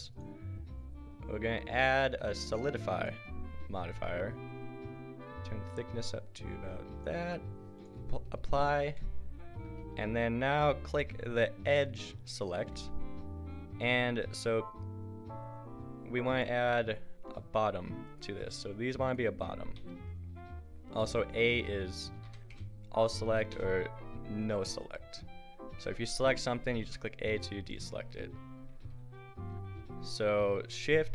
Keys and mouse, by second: 0.1-2.6 drag, 3.1-6.0 drag, 8.8 Tab, 11.4 middle click, 12.7 a, 16.0 middle click, 19.8 a, 22.3 a, 22.5 a, 23.5 a, 25.9-27.4 right drag, 26.8 a.